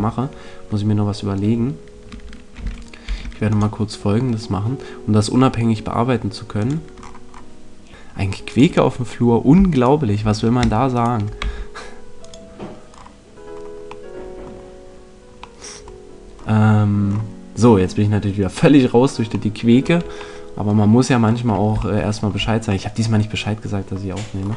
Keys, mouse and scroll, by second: 3.0 ctrl+r, 6.6 click, 7.8 alt+Tab, 11.4 x, 13.4-14.6 middle drag.